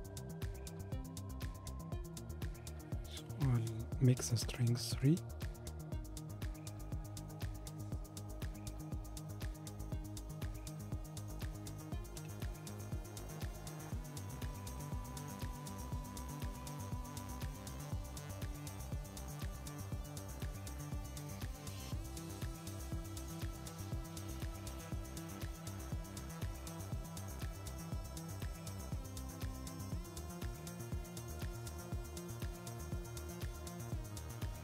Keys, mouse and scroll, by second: 3.1-6.2 drag, 7.3-10.4 middle drag, 12.2 KP_7, 15.1 g, 19.3-21.6 middle drag, 21.6 click, 28.5-31.6 drag, 32.7-34.6 drag.